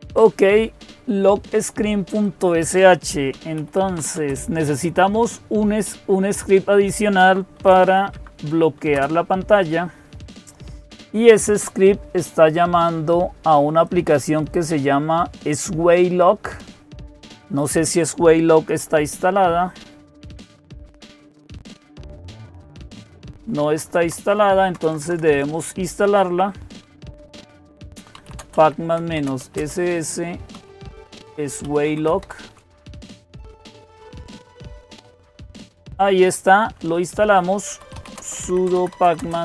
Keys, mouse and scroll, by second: 2.0 click, 3.2-4.3 typing, 7.4 typing, 7.9 shift+Tab, 8.7 Return, 13.7-20.2 drag, 20.0-21.6 typing, 21.7 Tab, 22.1-22.9 Tab, 23.1 Tab, 23.5 Tab, 23.6 Tab, 23.9 Tab, 24.5 BackSpace, 24.7 BackSpace, 24.9 BackSpace, 25.1 BackSpace, 26.8-32.5 typing, 32.6 Return, 37.3-39.4 typing.